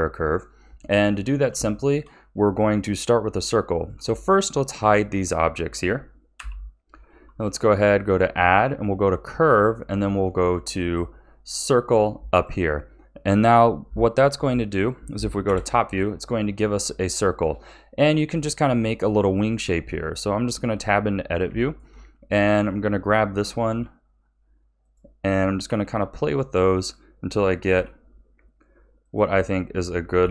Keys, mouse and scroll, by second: 1.7-3.7 shift+middle drag, 3.7 click, 4.2-4.8 shift+middle drag, 4.8 shift+click, 6.3 h, 7.1 shift+a, 15.4 KP_7, 16.8-18.3 scroll up 2, 18.3-19.6 shift+middle drag, 19.6 Tab, 21.6 shift+middle click, 22.3 click, 23.7 g, 25.6 r, 27.7 g, 30.2 a.